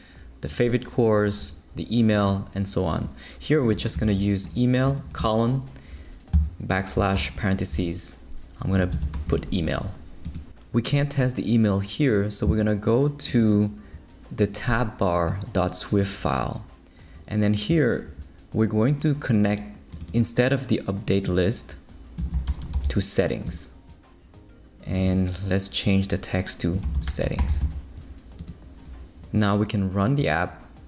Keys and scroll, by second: 3.8-9.6 typing, 7.7 shift+Left, 8.4 Left, 22.1-23.2 typing, 23.5 Return, 26.6-28.1 typing.